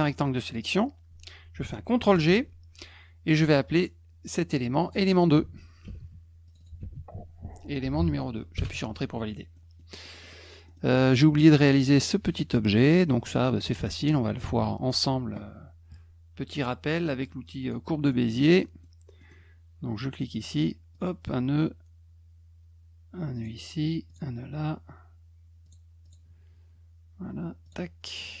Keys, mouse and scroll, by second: 2.1 ctrl+g, 4.7 click, 4.8 click, 5.8 ctrl+c, 6.4 click, 6.6 click, 6.8 ctrl+v, 7.8 BackSpace, 8.5 Return, 9.5 middle click, 10.0 middle click, 10.2 middle click, 10.7 middle click, 12.8 middle click, 13.3 middle click, 13.8 middle click, 14.4 ctrl+s, 17.6 click, 18.1 middle click, 18.6 middle click, 19.2 middle click, 20.3 click, 20.9 click, 23.3 click, 24.1 click, 25.6 click, 26.0 click, 27.6 click.